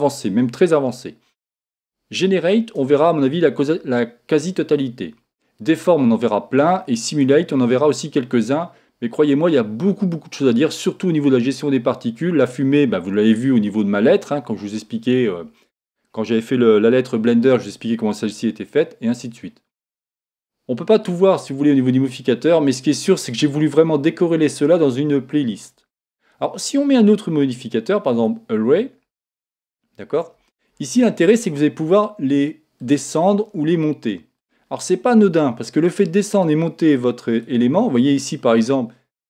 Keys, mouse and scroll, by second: 27.1 click, 28.9-31.2 middle drag, 32.8-36.1 drag, 36.3-39.1 drag.